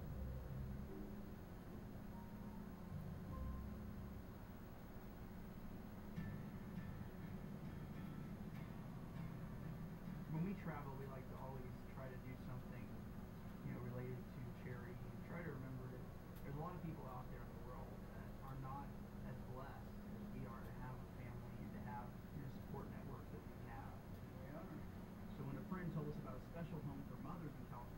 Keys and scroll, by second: 23.5 ].